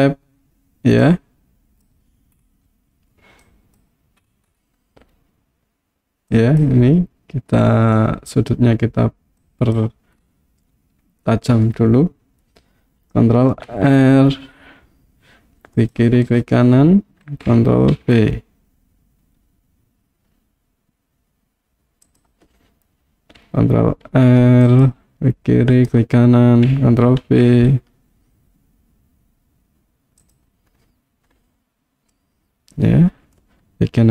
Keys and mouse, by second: 1.0 click, 3.4 click, 6.3 click, 9.4 click, 13.7 ctrl+r, 16.3 right click, 18.0 ctrl+b, 22.1 click, 24.1 ctrl+r, 25.8 right click, 27.3 ctrl+b, 30.3 click, 32.1-33.4 middle drag.